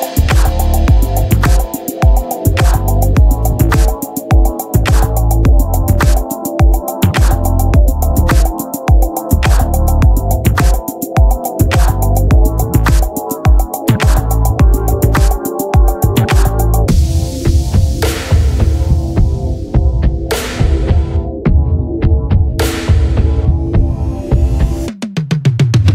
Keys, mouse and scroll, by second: 0.8-5.1 middle drag, 4.2 z, 5.1-9.3 drag, 11.5-12.6 drag, 12.6-18.6 middle drag, 19.5 t, 19.9-24.6 drag, 24.6 t.